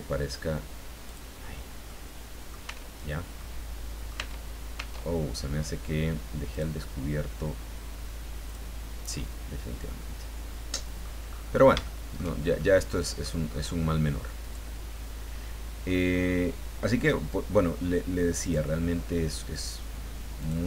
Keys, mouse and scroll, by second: 1.0 click, 1.6 scroll down 1, 1.8 middle click, 2.7 Tab, 3.0-3.4 scroll down 2, 3.4 middle click, 4.2 Tab, 6.5 click, 8.4 click, 9.1-11.2 middle drag, 11.3-11.7 scroll up 1, 11.7 scroll down 1, 11.8 shift+middle click, 12.6 shift+middle click, 13.5-14.0 scroll up 1, 14.4 right click, 17.0 click, 18.4 click, 20.4 click.